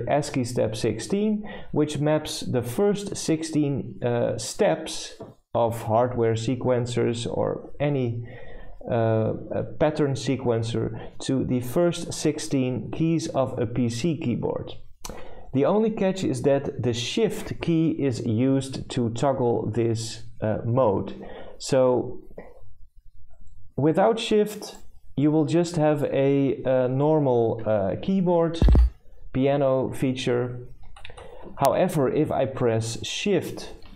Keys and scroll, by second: 28.3-29.2 typing, 30.3 z, 33.6-33.9 typing.